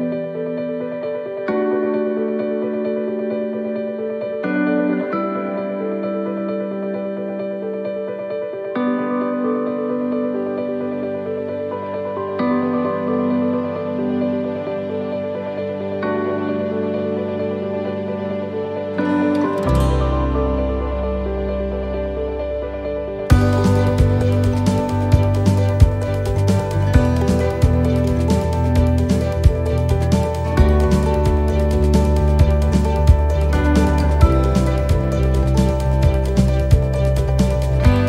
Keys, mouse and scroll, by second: 2.6 click, 5.9 click, 17.4-18.2 scroll down 9, 18.5 shift+middle click, 19.1-20.2 scroll down 1, 20.2 click, 21.6 shift+middle click, 22.2 scroll up 1, 23.2-23.5 scroll up 9, 23.6 click, 25.6 click, 29.5 click, 29.5 middle click, 31.0 click, 32.1 shift+middle click, 32.7 scroll down 2, 33.4 scroll down 2, 33.5 shift+middle click, 34.6 click, 36.4 shift+d, 37.4 click.